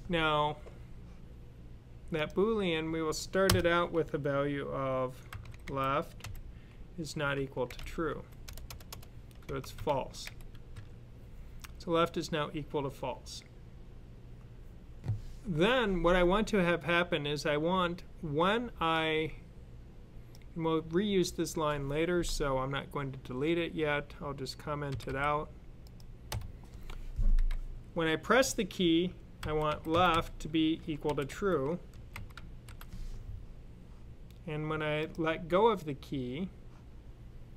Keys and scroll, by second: 5.2-10.6 typing, 24.7 typing, 29.0-32.5 typing.